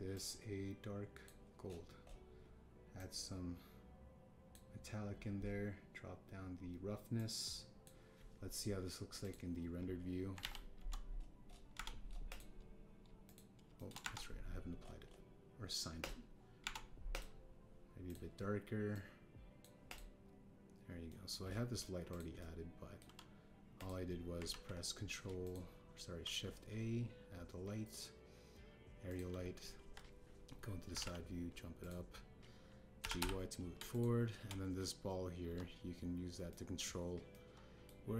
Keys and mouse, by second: 0.5 click, 3.9-5.5 drag, 8.2 click, 11.3 alt+z, 11.7 KP_1, 12.7 Tab, 13.2 click, 14.3 click, 14.7 shift+drag, 15.0 Tab, 17.6 Tab, 18.1 click, 20.8 click, 22.0 middle drag, 23.3-23.9 drag, 24.7 click, 25.4 ctrl+a, 26.4 click, 27.1 shift+a, 30.8 KP_3, 31.9 g, 31.9 z, 32.8 click, 33.9 g, 34.2 y, 36.4 KP_1, 37.4 drag.